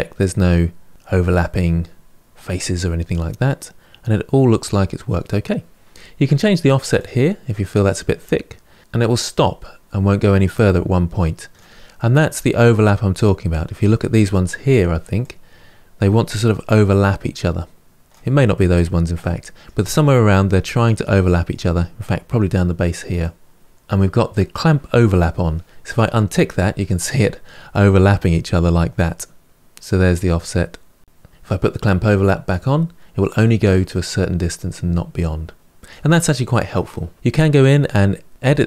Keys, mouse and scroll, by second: 1.2-4.2 middle drag, 6.7-8.8 drag, 11.7-14.7 middle drag, 15.0-17.9 drag, 18.3-23.0 middle drag, 23.0 click, 25.7 click, 27.5-29.5 drag, 31.7 click, 32.9-35.3 drag, 36.9-38.1 middle drag, 38.1 click.